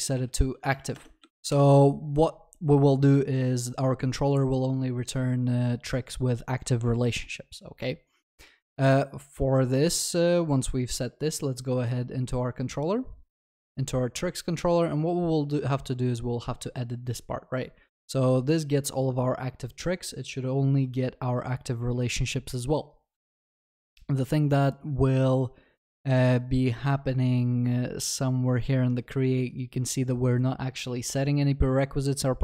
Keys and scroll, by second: 1.3 ctrl+s.